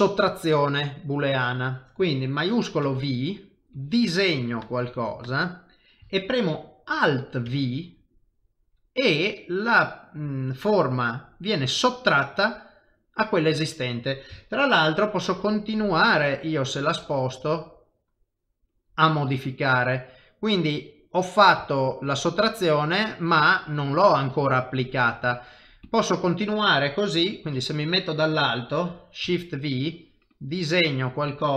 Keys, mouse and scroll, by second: 0.3 middle click, 2.8 shift+v, 3.7 click, 9.0 middle click, 12.0 middle click, 14.4 ctrl+middle click, 15.6 g, 19.4 middle click, 21.7 shift+middle click, 22.1 middle click, 25.8 click, 26.5 middle click, 27.1 KP_7, 29.2 shift+v, 29.8 click.